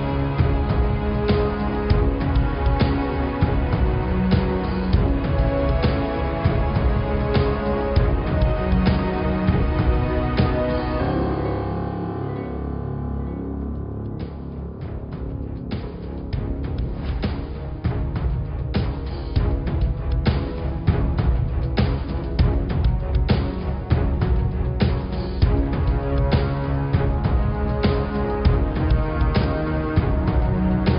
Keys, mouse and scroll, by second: 1.3 click, 1.7-2.1 scroll up 3, 2.7 f, 3.6 g, 5.9 s, 8.3 click, 9.1 g, 13.3 click, 14.3 g, 16.4 click, 17.1-18.4 scroll up 2, 18.4 s, 19.8 ctrl+r, 20.1 Tab, 20.6 ctrl+r, 24.4 click, 24.7 s, 26.1 Tab, 26.4 scroll down 2, 26.6 middle click, 27.0-27.4 scroll down 5, 27.4-28.8 scroll up 5, 28.8 middle click, 29.3 Tab, 30.1-30.5 scroll down 5, 30.5 middle click.